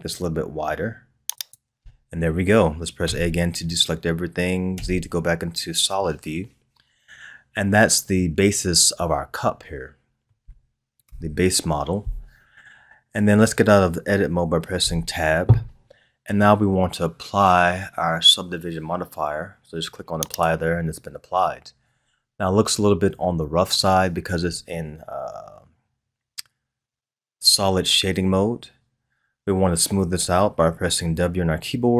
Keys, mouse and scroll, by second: 3.0 a, 4.7 z, 8.1-11.0 middle drag, 11.0 KP_1, 14.8 Tab, 20.3 click.